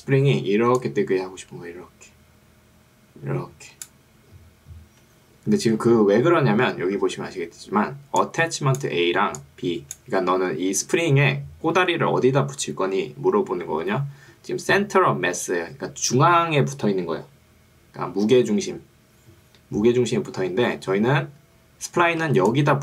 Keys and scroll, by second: 5.7 Escape, 7.1 ctrl+2, 10.5 Escape, 22.3 ctrl+2.